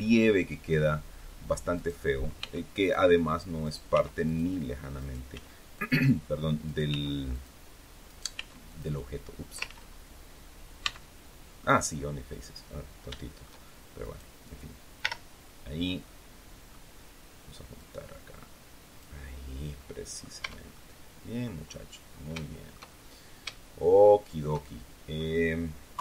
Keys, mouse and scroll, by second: 1.6 right click, 2.3 x, 2.7 click, 3.5 right click, 3.8 x, 4.2 click, 4.9 right click, 5.2 x, 5.7 click, 6.6 right click, 6.8 x, 7.2 click, 8.0 right click, 8.2 x, 8.6 click, 9.6 ctrl+z, 10.7 x, 12.2 click, 12.7 scroll down 1, 13.0 shift+middle click, 13.9 right click, 14.9 l, 15.9 middle click, 17.7-19.1 drag, 19.3-19.7 scroll down 1, 19.7 middle click, 20.3 Tab, 20.6 middle click, 21.6-22.2 scroll down 2, 22.3-25.3 shift+middle drag, 25.8 KP_3.